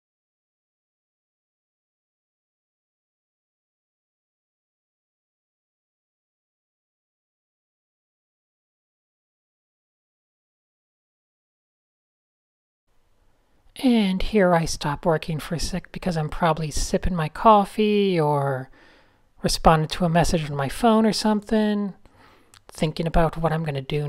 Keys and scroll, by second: 0.4 Tab, 3.2 Tab, 3.6 d, 10.6 Tab, 12.2 alt+shift+super+r, 22.0-23.7 typing.